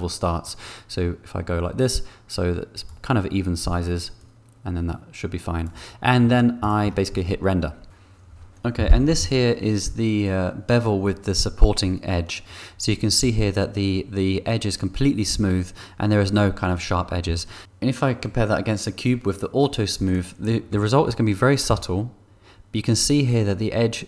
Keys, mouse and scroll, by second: 0.6-2.8 shift+drag, 4.1-5.6 shift+drag, 22.1 2.